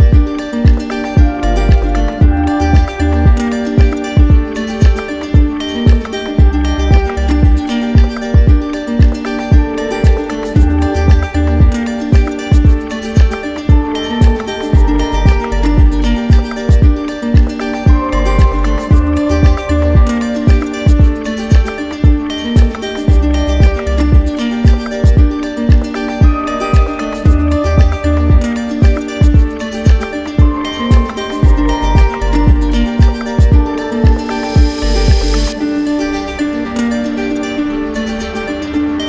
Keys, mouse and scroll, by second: 0.5 click, 1.8 right click, 2.7 right click, 3.3 right click, 3.9 shift+right click, 4.5 shift+right click, 6.5 click, 8.4 right click, 9.0 shift+right click, 11.0 click, 12.4 click, 13.9 ctrl+click, 14.5 click, 15.8 ctrl+click, 16.2 ctrl+click, 17.7 right click, 21.1-22.3 drag, 23.6-24.7 right drag, 25.5 click, 26.6 right click, 26.9 shift+right click, 27.9 right click, 28.5 alt+middle click, 30.4 q, 31.7-32.7 right drag, 33.9-35.0 drag, 37.5-38.6 drag.